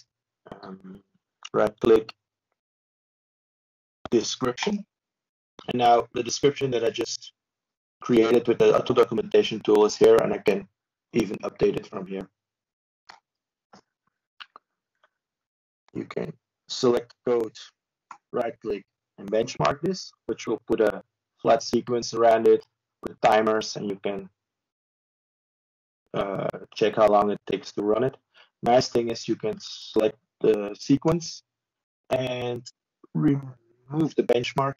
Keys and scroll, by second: 19.2 ctrl+space, 21.1 ctrl+1, 27.0 ctrl+space, 27.7 ctrl+1.